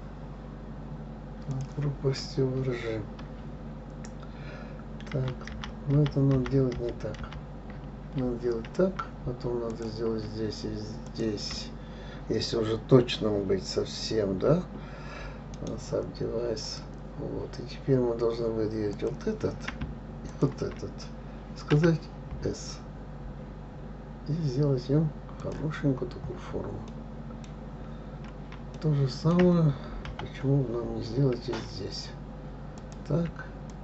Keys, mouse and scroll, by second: 5.5 ctrl+z, 5.9 ctrl+z, 7.2 ctrl+z, 10.1 click, 11.5 shift+click, 16.0-19.3 right drag, 19.3 click, 20.7 shift+click, 22.1 s, 26.3-27.3 scroll down 5, 27.3 middle click, 27.9-28.5 scroll down 2, 28.5-28.9 scroll up 2, 29.1-30.5 shift+middle drag, 30.5 KP_7, 31.1-33.2 scroll up 5, 33.2 click.